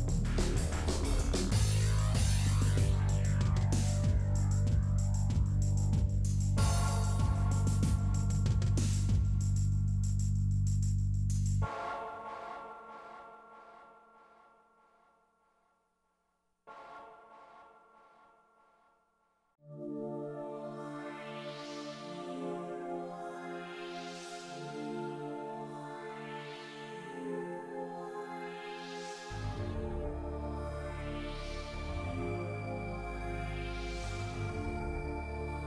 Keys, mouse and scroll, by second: 0.4 shift+d, 1.7 middle click, 2.6 click, 2.8-5.8 middle drag, 5.8-6.3 scroll up 1, 6.3 scroll up 1, 6.6-10.6 shift+middle drag, 10.6 scroll up 2, 10.9 shift+middle click, 12.0 click, 12.9-14.9 shift+middle drag, 15.3 shift+a, 16.3 g, 17.7 click, 19.0 n, 20.0 click, 21.6 click, 23.0-26.2 drag, 26.7-27.8 drag, 27.8 click, 28.2 s, 28.8 ., 29.9 s, 30.7 s, 31.5 e, 32.8-33.8 shift+middle drag, 34.5 middle click, 34.8 click, 35.1 s, 35.6 a.